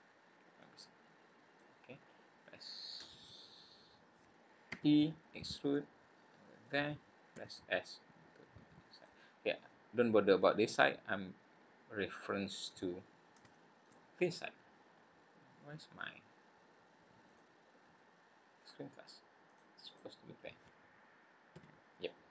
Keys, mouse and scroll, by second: 21.5 n.